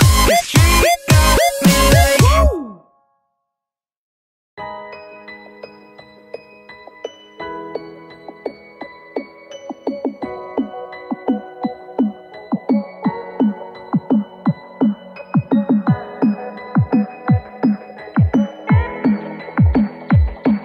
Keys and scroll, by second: 2.0 ctrl+z.